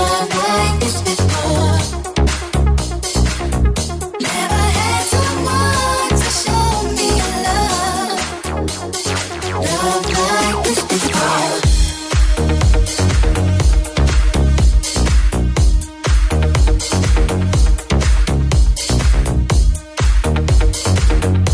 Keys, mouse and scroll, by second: 1.0 Tab, 4.6 middle click, 4.6 right click, 5.2 middle click, 5.2 right click, 5.6 middle click, 5.6 right click, 6.0 shift+middle click, 6.0 shift+right click, 8.0 e, 9.2-21.5 middle drag, 9.8 g, 11.8 g, 12.5 w, 16.0 ctrl+z, 16.5 r, 18.5 g, 21.1 KP_1.